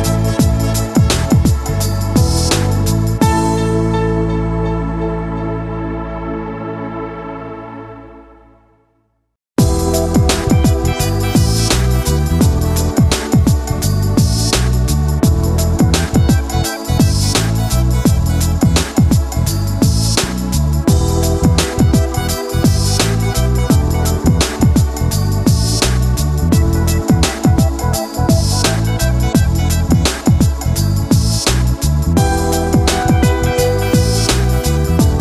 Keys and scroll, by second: 7.5 ctrl+z, 25.9 ctrl+z, 33.3 ctrl+z.